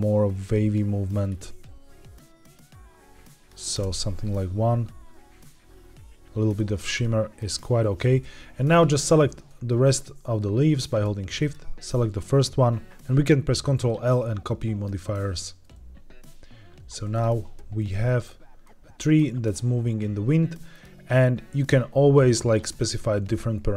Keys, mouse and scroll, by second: 0.1-1.2 drag, 1.5-3.4 drag, 3.6 space, 6.9-7.7 middle drag, 7.7-8.6 scroll down 1, 8.6 click, 9.8 shift+click, 11.3 shift+click, 12.9 ctrl+l, 13.6 ctrl+l, 17.1 click, 17.7-18.7 scroll down 1, 18.7-20.0 middle drag, 20.7 click.